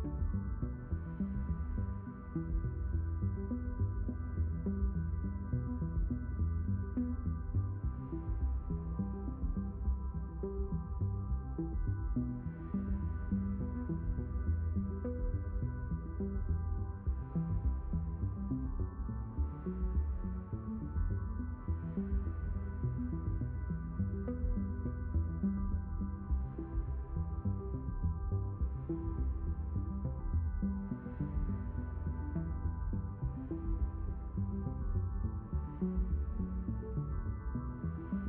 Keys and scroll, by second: 19.9 d, 26.6 s, 31.9 q, 33.2 d, 34.3 s.